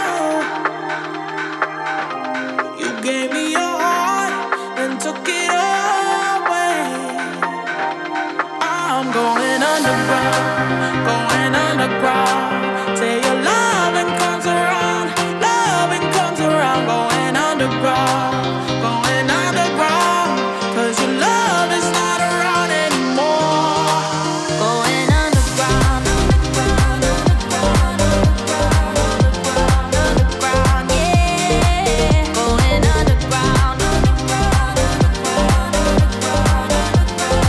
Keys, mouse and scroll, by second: 4.0 space, 5.2 space, 6.3 space, 7.3-23.5 drag, 28.2-35.3 drag, 36.8 space.